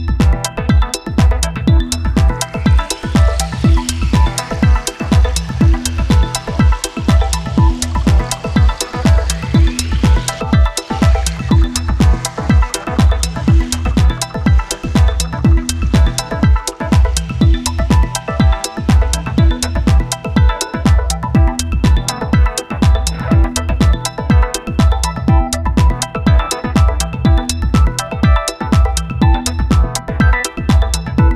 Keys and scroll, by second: 8.8 space, 14.4 space, 19.7 space, 20.5 space, 22.3 space, 27.9 space.